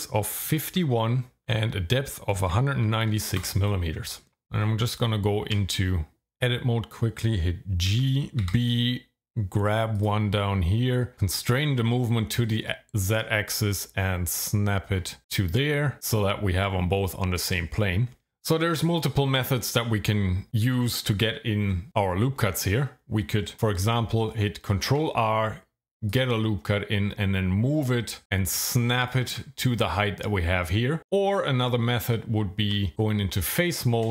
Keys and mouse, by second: 4.6 Tab, 7.9 g, 8.4 b, 9.9 click, 11.1 z, 24.9 ctrl+r, 26.1 click, 29.0 ctrl+click, 32.0 Tab.